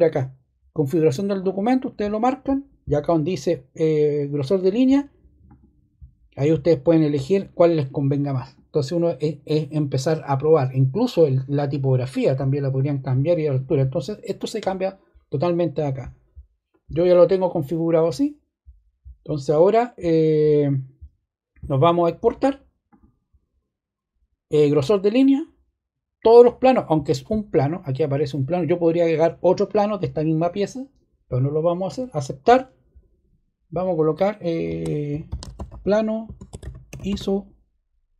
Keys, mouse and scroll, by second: 4.4 click, 5.4 click, 6.8 click, 31.8 click, 34.8-37.5 typing.